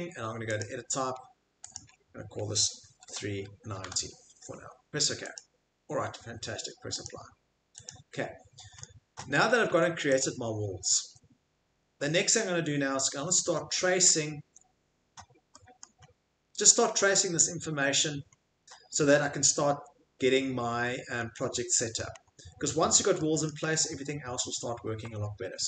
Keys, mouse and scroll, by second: 0.9 typing, 1.7 click, 2.8-4.3 typing, 5.4 click, 7.0 click, 7.8 click, 8.5 middle click, 8.8-10.2 middle click, 8.8 scroll, 9.6 Escape, 10.2 click, 11.0 Escape, 11.5 middle click, 11.9 middle click, 12.3 middle click, 13.0 middle click, 14.1 middle click, 14.4 Escape, 15.8 middle click, 16.1 middle click, 16.2 middle click, 17.0 middle click, 17.5 middle click, 17.6 middle click, 17.6 middle click, 18.3 middle click, 18.3 middle click, 20.1 middle click, 21.0 middle click, 21.1 middle click, 21.2 middle click, 21.3 middle click, 22.0 middle click, 22.2 middle click, 22.3 middle click, 23.5 middle click, 23.6 middle click, 23.7 middle click, 25.0 Escape.